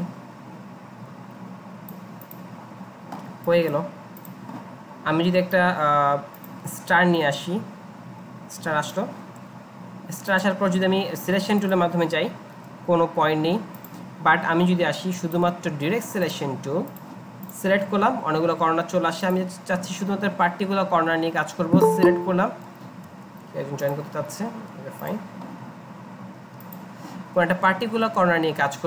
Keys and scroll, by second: 23.1 alt+Tab.